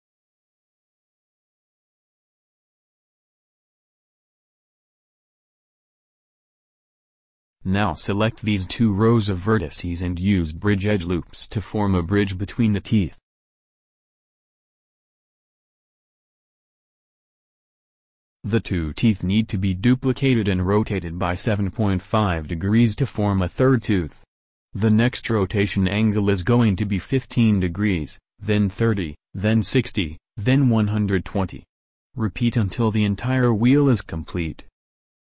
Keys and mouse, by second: 0.2-3.4 middle drag, 3.4 a, 4.5-7.6 drag, 9.1 c, 12.2-14.2 middle drag, 16.2 w, 22.8 Tab, 23.7 Tab, 24.4 a, 25.2 a, 27.1 shift+d, 31.2 a, 31.4 a, 32.6 shift+d.